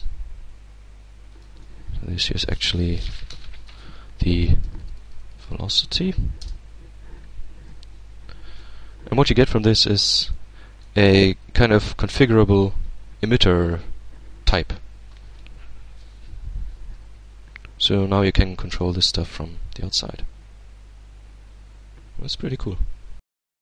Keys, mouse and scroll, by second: 0.4 click, 3.3-4.5 typing, 5.2 shift+Return, 8.6 Tab, 9.2 click, 9.8 middle click, 10.2-11.3 drag, 17.0-23.1 drag.